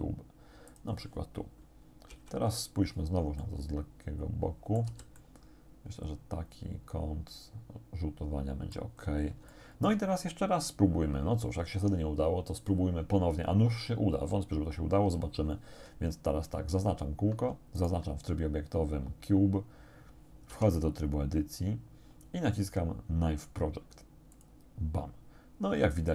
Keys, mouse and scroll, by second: 0.7 click, 2.1 KP_1, 3.5-5.0 drag, 4.9 z, 5.2-9.0 drag, 9.5 shift+click, 17.8 shift+right click, 20.5 Tab, 24.4 click.